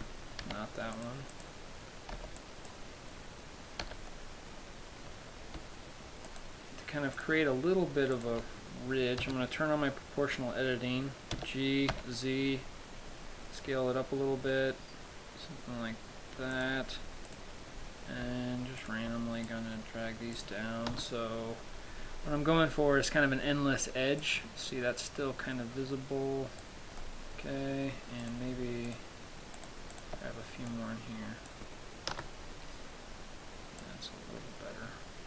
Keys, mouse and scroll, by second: 1.3 b, 1.6 click, 2.5 b, 5.7 b, 6.6 shift+right click, 7.5 shift+right click, 9.5 o, 11.6 g, 16.9 click, 17.5 right click, 19.1 shift+right click, 19.8 click, 21.2 KP_0, 22.1-23.3 scroll up 5, 24.5 click, 27.3 middle click, 28.5 right click, 29.1 shift+right click, 29.8 right click, 30.5 shift+right click, 31.0 click, 32.5 KP_0, 33.4-34.0 scroll down 2, 34.1 click.